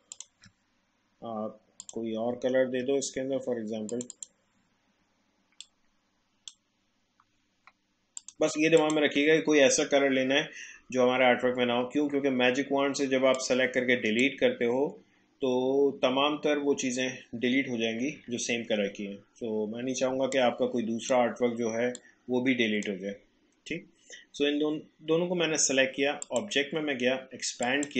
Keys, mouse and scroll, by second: 3.9-8.2 drag, 13.3-16.6 drag, 20.1 space, 20.3 click, 20.6 space, 22.0 click, 22.1 space, 23.7 space, 26.2-27.9 drag.